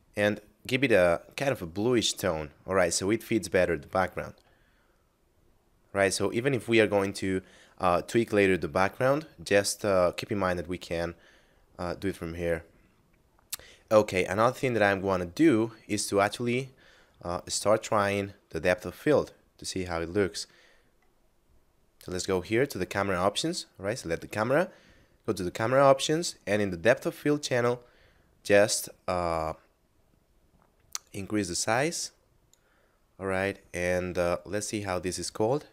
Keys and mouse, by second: 4.6 middle click, 12.0 middle click, 17.8 right click, 21.3 middle click, 25.2 click, 31.0 click, 34.6 right click.